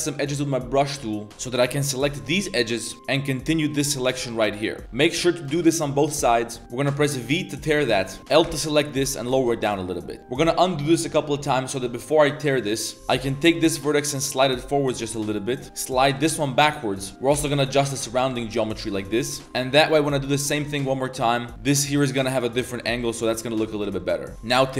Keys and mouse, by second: 1.3 b, 2.0 b, 3.9 shift+click, 4.5 ctrl+click, 4.9 z, 6.0 ctrl+click, 6.2 z, 6.4 middle click, 6.6 v, 7.0 v, 8.2 1, 8.2 a, 8.4 l, 8.6 middle click, 9.0 g, 10.2 ctrl+z, 11.1 1, 11.7 click, 11.8 z, 12.2 middle click, 12.8 middle click, 12.9 z, 12.9 KP_1, 12.9 b, 13.4 g, 15.6 a, 15.6 b, 16.1 g, 17.1-22.9 typing, 19.8 alt+shift+click, 23.9 click, 23.9 z, 24.3 z, 24.4 v.